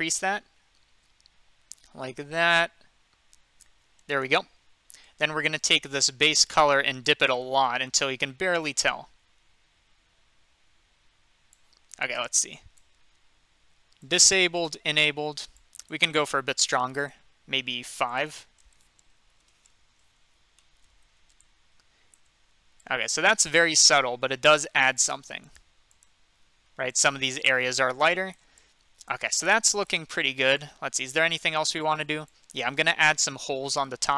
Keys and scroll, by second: 19.3 typing, 19.4 Return.